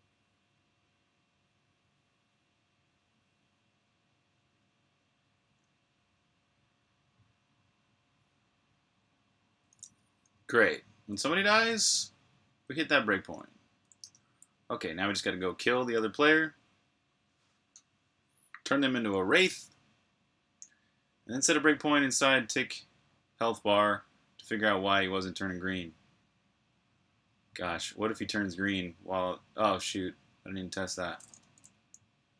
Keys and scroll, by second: 0.0-0.5 typing, 13.9-15.0 typing, 15.3 super+h, 31.1-32.1 typing.